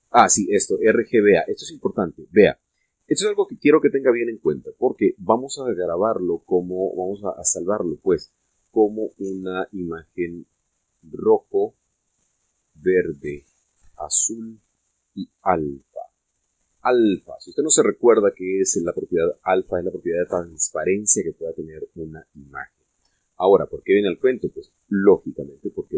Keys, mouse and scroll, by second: 18.2 Escape.